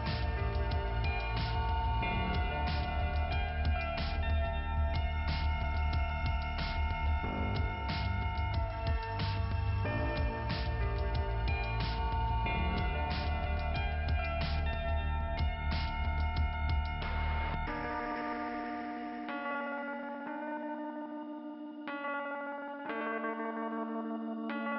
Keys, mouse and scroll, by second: 0.5-1.1 scroll up 3, 0.9 click, 1.1 click, 2.2 middle click, 5.4 click, 10.2 click, 10.7 click, 12.2 middle click, 14.0 click, 14.4 click, 14.5 double click, 16.7 click, 17.5 click, 19.0 click, 20.4 click, 21.5 scroll down 1, 21.6 click, 22.4 click, 22.4 scroll down 1, 23.3 middle click.